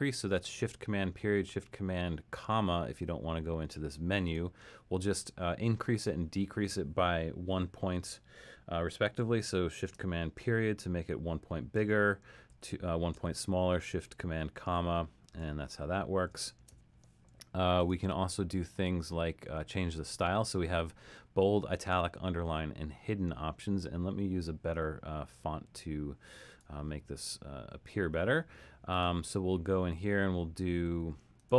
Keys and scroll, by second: 10.4 shift+super+>, 11.7 shift+super+>, 12.5 shift+super+<, 13.2 shift+super+<, 14.8 shift+super+<, 15.4 shift+super+>, 16.3 shift+super+<.